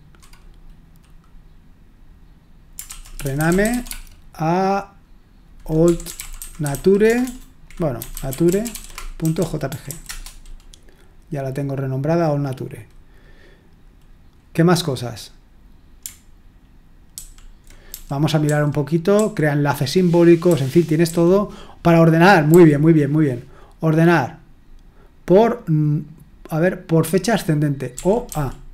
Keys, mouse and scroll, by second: 2.9-4.2 typing, 5.6-10.4 typing, 17.1 super+l, 17.9-19.1 typing, 20.5-21.1 typing, 22.5 typing, 28.0 typing.